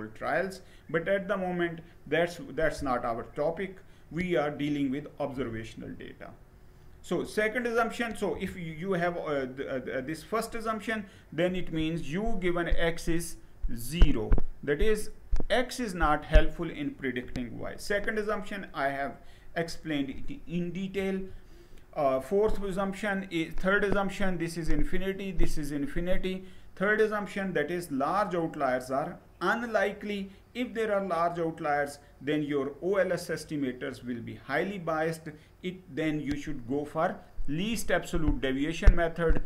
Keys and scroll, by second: 5.0 Right, 7.9 Left, 17.3 Down, 20.6 Down.